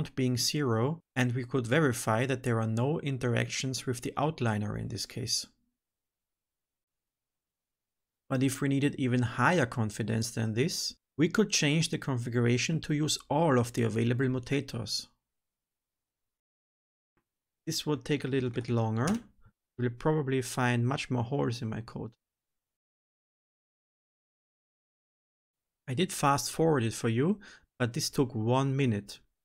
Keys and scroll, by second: 6.8 ctrl+z, 12.3 Return, 15.1 ctrl+s, 17.3 alt+shift+F10.